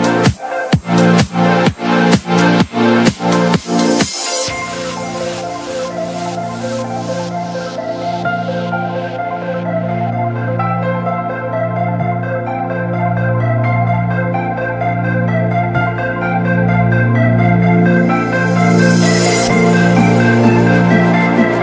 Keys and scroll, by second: 8.9 t, 11.0 ctrl+z, 12.7 Escape, 14.3 alt+c.